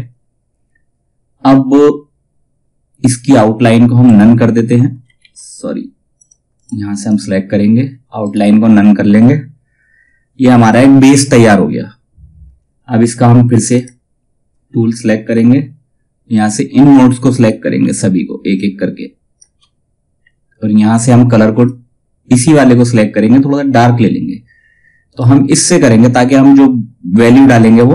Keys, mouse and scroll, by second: 3.6 right click, 4.7 ctrl+z, 5.7 click, 7.7 right click, 13.3 click, 14.6 scroll up 1, 15.8-21.1 drag, 24.6 click, 27.1 click.